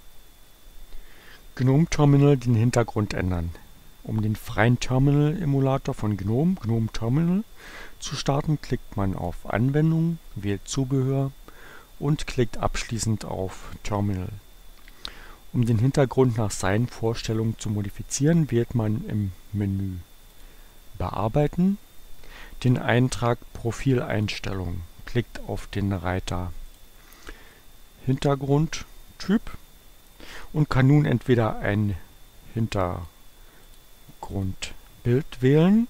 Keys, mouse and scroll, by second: 0.0 click, 9.1 click, 13.1-14.3 drag, 20.3 click, 24.2 click, 26.7 click, 27.5-29.9 drag, 32.6-33.6 drag, 33.8 click, 34.4 click.